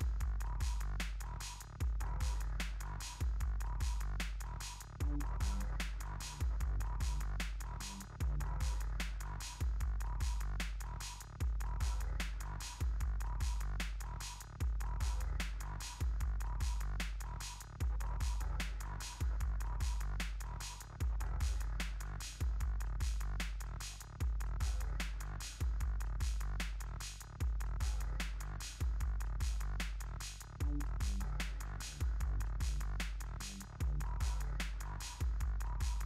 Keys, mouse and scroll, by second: 0.8 click, 5.3 ctrl+a, 6.0-8.0 typing, 8.5 click, 9.1 ctrl+a, 9.3-13.2 typing, 11.8 Tab, 15.0 click, 19.7 click, 23.5 click, 25.6 click.